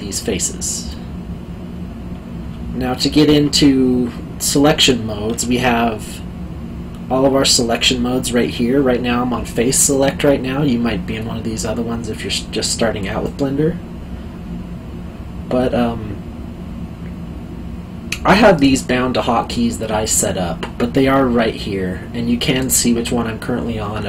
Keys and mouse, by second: 0.1 click, 0.9 middle click.